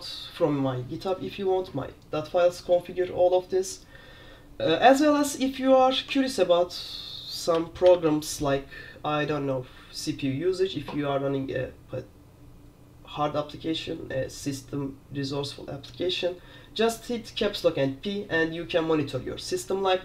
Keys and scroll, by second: 7.6 super+q, 7.9 super+p.